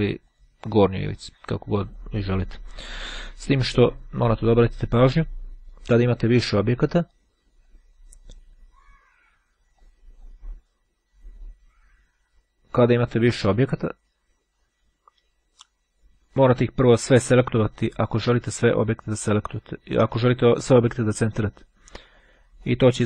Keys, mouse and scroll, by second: 0.2 click, 2.0 click, 3.2 click, 7.1 click, 8.8 click, 9.9 click, 12.2 click, 13.2 click, 16.8-18.7 drag, 22.7 click.